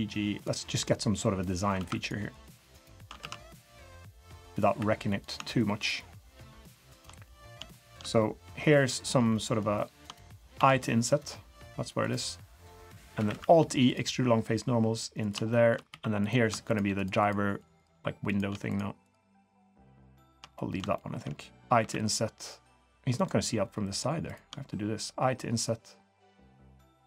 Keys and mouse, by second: 0.8-1.4 drag, 1.7 1, 2.0 click, 2.3 click, 3.2 ctrl+z, 3.6-4.6 drag, 4.7 3, 7.2 middle drag, 7.7 shift+middle click, 8.6-9.1 middle drag, 9.3-9.7 shift+middle drag, 10.5 i, 13.2 alt+e, 15.5 shift+middle click, 15.5 shift+click, 15.9 3, 16.2 click, 16.7 shift+click, 16.9 shift+click, 18.2 click, 19.3 shift+click, 19.6 shift+click, 20.0 shift+click, 20.2 shift+click, 20.5 middle click, 20.9 shift+middle click.